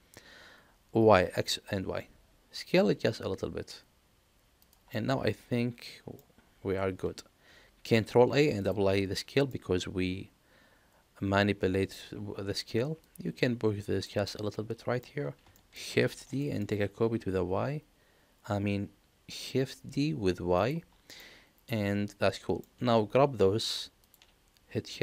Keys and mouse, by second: 4.9-6.1 middle drag, 7.8 ctrl+a, 9.4-11.9 middle drag, 13.0-14.0 drag, 14.2 middle click, 15.5 shift+middle click, 16.1 shift+d, 21.2-22.5 middle drag, 24.0 shift+click.